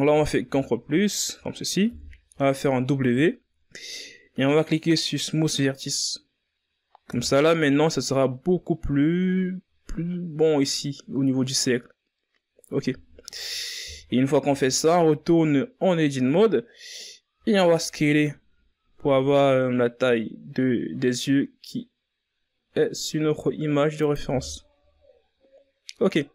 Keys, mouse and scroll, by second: 0.9 w, 5.1 Tab, 9.6-10.3 scroll down 4, 10.3-10.9 scroll up 3, 10.9 z, 11.6 scroll up 2, 11.8 z, 12.4 Tab, 15.4 s, 22.3 Tab, 22.6-23.6 scroll down 5, 24.9 ctrl+s.